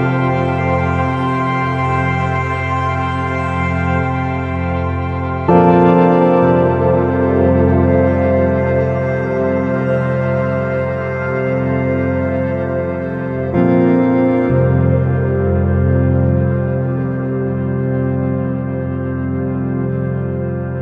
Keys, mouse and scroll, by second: 0.8 r, 4.9-6.3 drag, 6.3-8.7 middle drag, 13.4 r, 17.8-20.8 drag.